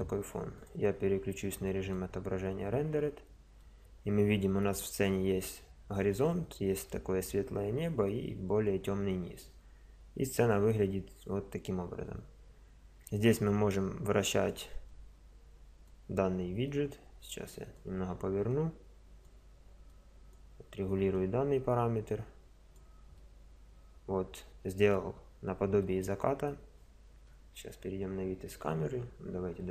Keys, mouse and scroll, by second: 2.0 click, 2.2 middle drag, 3.7 click, 3.8-4.5 middle drag, 4.5 click, 4.6-8.1 middle drag, 9.0-9.6 middle drag, 9.9-10.4 middle drag, 10.5-11.7 middle drag, 13.4-20.2 drag, 20.2 click, 20.6-21.2 middle drag, 21.2 click, 21.6 click, 21.8 middle click, 22.2 middle click, 22.3 click, 22.4 middle click, 22.5 click, 22.6 middle click, 23.4 middle click, 23.6-27.4 middle drag, 27.4 KP_0.